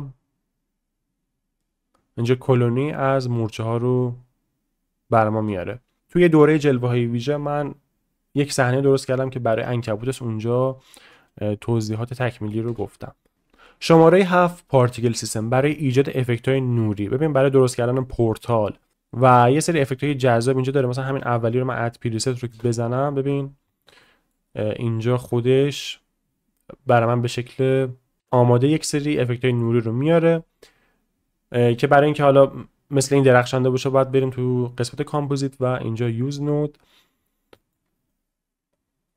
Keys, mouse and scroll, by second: 6.0 space, 12.7 space, 15.8-20.7 drag, 22.5 space, 23.7 shift+middle drag, 24.0-24.3 middle drag, 27.3 space, 29.1-29.6 middle drag, 30.0 shift+middle click, 30.3 middle click, 32.2-34.0 drag.